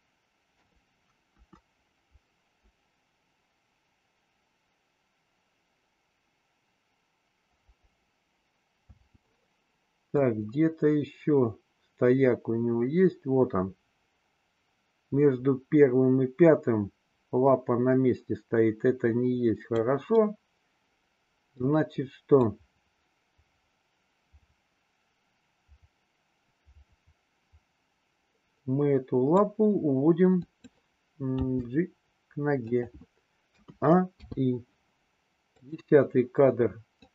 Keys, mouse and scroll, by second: 0.6 KP_3, 1.3 KP_1, 8.9 space, 10.2-19.7 drag, 20.1-21.6 middle drag, 22.3-29.5 drag, 30.5 click, 31.3 g, 33.5 a, 34.2 i, 35.6 click, 36.8 click.